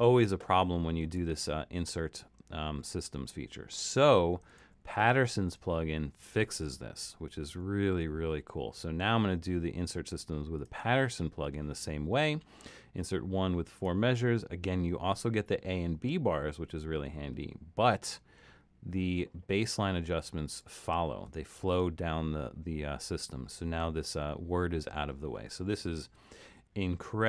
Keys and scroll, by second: 1.0 super+z, 26.6 super+-.